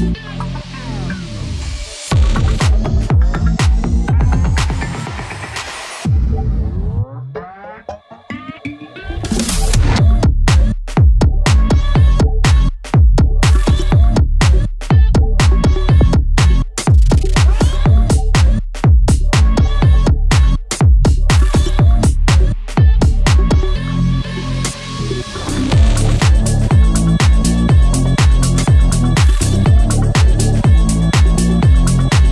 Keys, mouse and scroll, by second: 5.4 scroll up 1, 6.3-9.7 drag, 10.1 scroll down 1, 11.3 click, 12.5 scroll up 1, 17.9 click, 23.4 click.